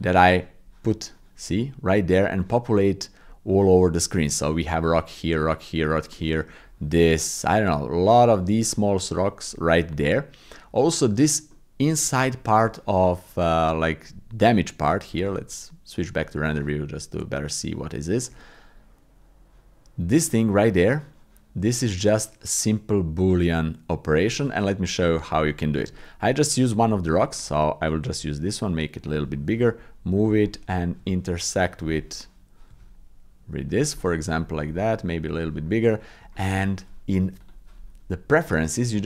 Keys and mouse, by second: 4.1 click, 8.4 shift+click, 8.6 shift+middle click, 10.9 middle click, 11.5 click, 11.7 middle click, 12.3 shift+click, 14.0 click, 14.5 middle click, 14.8 middle click, 25.4 middle click, 25.9 shift+middle click, 28.0 s, 29.4 g, 30.4 click, 31.0 g, 31.9 click, 32.7 g, 33.9 click, 34.1 middle click, 34.6 s, 35.7 click, 35.8 middle click, 36.3 shift+click, 37.5-38.5 drag.